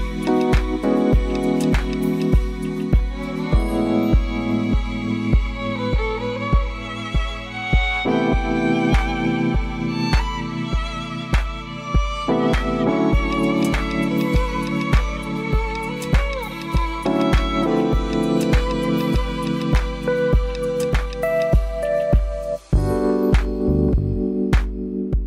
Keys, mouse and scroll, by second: 0.0 z, 2.6 click, 2.6 typing, 3.2 click, 3.8 click, 4.4 g, 4.9 z, 6.2 click, 6.7 click, 7.3-10.3 middle drag, 11.1 click, 12.2 shift+click, 12.8 g, 13.1 z, 16.9 click, 17.3 middle click, 18.0 Tab, 18.7 click, 20.1-20.8 middle drag, 21.2-25.2 drag.